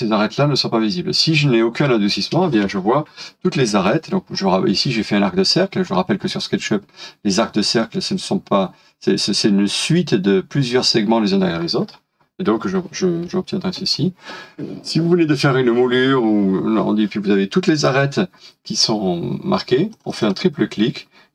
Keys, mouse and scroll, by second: 2.4 space, 4.3 scroll up 1, 11.6 scroll down 1, 13.2 middle click, 20.1 double click.